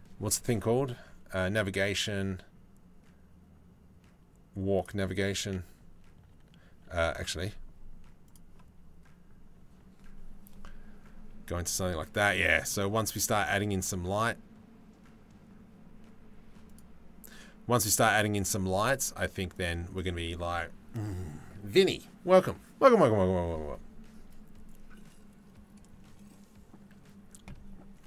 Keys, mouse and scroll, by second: 6.3 middle click, 10.7-12.3 middle drag, 13.4 middle click.